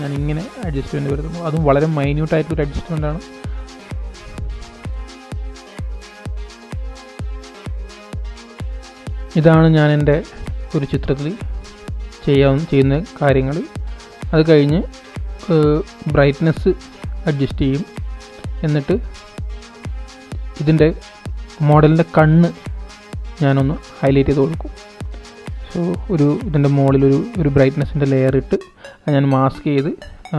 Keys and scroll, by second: 4.8 super+1, 30.1 super+BackSpace.